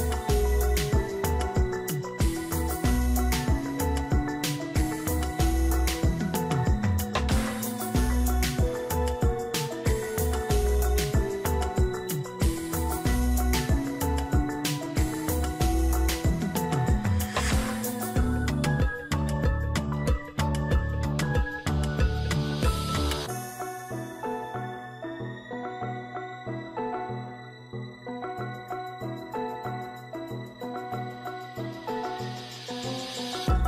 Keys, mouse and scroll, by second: 4.7-6.7 [, 9.3-10.0 [, 11.1 Return, 11.6 Return, 12.5 ], 13.0 ], 15.2-15.9 ], 27.9-29.3 scroll down 4, 29.3-30.7 scroll down 1, 30.7-33.1 scroll up 5.